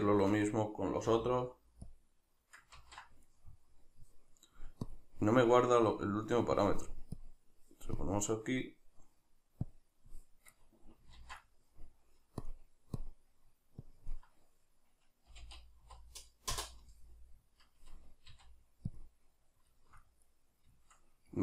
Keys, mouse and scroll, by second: 0.0 Tab, 4.1 middle click, 4.9-10.6 drag, 10.6-12.4 middle drag, 11.2 ctrl+z, 12.4-19.8 drag, 19.8-21.4 shift+middle drag.